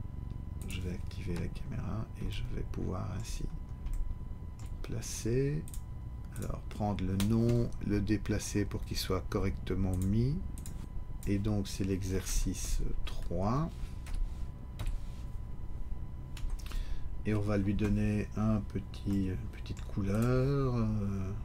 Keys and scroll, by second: 12.2 Tab, 14.1 BackSpace, 14.8 3, 16.4 Tab.